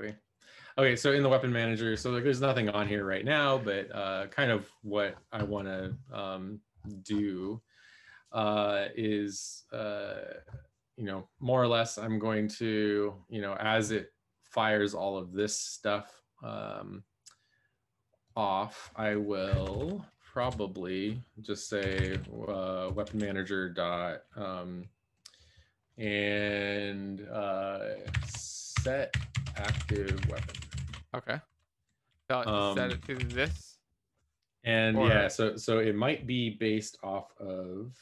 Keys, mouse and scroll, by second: 19.7 Return, 19.7 Up, 20.3 Down, 21.8-23.5 typing, 28.0-32.8 typing, 31.7 Left, 32.6 Right, 33.2 ctrl+s, 33.2 Left, 33.4 Left.